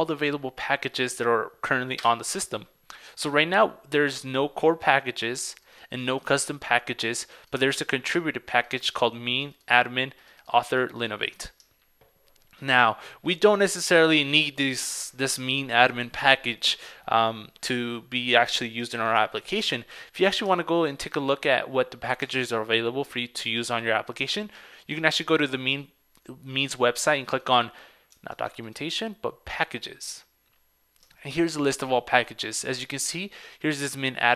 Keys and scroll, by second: 22.2 super+Tab.